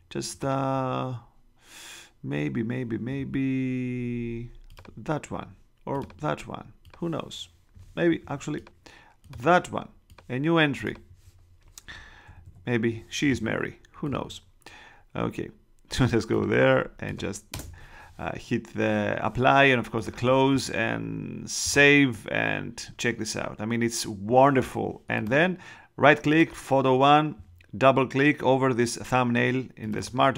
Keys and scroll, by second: 12.2 super+-, 17.5 shift+Return.